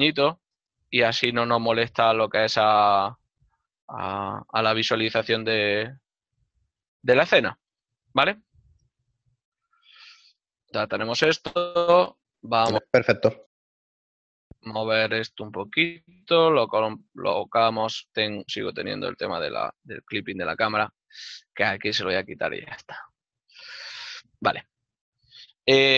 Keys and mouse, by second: 1.3 shift+middle click, 5.0 ctrl+Up, 6.1 ctrl+middle click, 6.5 click, 7.1 click, 7.9 shift+middle click, 12.0 right click, 13.9 click, 16.3 l, 23.8 click, 25.7 ctrl+middle click.